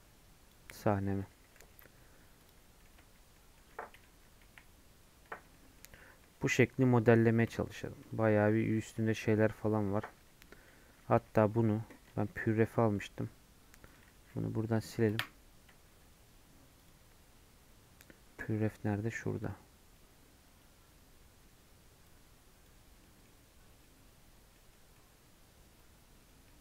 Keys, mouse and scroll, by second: 1.0-1.3 scroll down 5, 1.5 g, 2.7 scroll up 1, 3.3 middle click, 3.6-4.4 scroll up 1, 4.4 KP_1, 4.7 scroll up 2, 5.5-6.8 shift+middle drag, 6.8-7.2 scroll up 1, 7.2 scroll down 1, 7.5-9.1 shift+middle drag, 9.1-11.1 scroll down 5, 13.8-15.1 drag, 15.1 Delete.